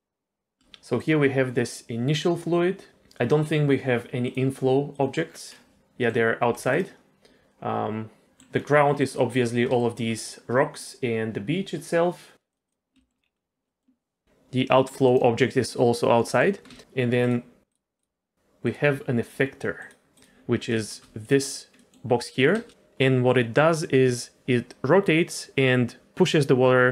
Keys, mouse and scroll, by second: 0.7 space, 0.9 click, 2.9 click, 4.2 click, 4.9 click, 5.3 scroll down 2, 5.5 middle click, 6.4 g, 8.2 middle click, 8.2 click, 8.6-9.1 scroll up 3, 9.1 middle click, 9.8 shift+middle click, 12.5 click, 13.0 shift+middle click, 13.2 scroll down 1, 13.6 middle click, 14.2 click, 14.2 g, 16.2 middle click, 16.7 shift+middle click, 17.2 click, 17.7 click, 17.9 click, 18.6 click, 19.8 click, 20.1 click, 20.7 shift+middle drag, 21.2 click, 21.7 middle drag, 22.6 space.